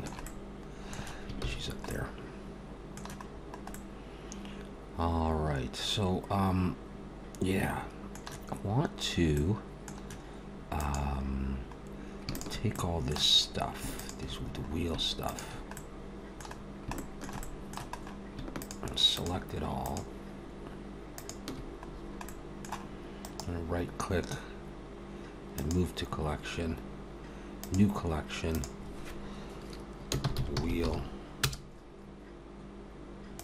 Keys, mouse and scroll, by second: 0.3 middle click, 1.4 ctrl+s, 1.9 middle click, 3.4 scroll up 1, 3.7 middle click, 9.3 middle click, 10.8 click, 12.3 shift+click, 12.7 middle click, 13.3-13.8 scroll up 2, 14.0 shift+click, 14.5 scroll up 1, 15.2 shift+click, 15.7 middle click, 16.5-17.3 scroll down 3, 17.0 shift+middle click, 17.4 middle click, 18.0 scroll up 2, 18.6 shift+click, 19.3 shift+click, 20.4 shift+click, 21.4 shift+click, 21.9 scroll down 3, 22.3 middle click, 23.2 right click, 30.6 e.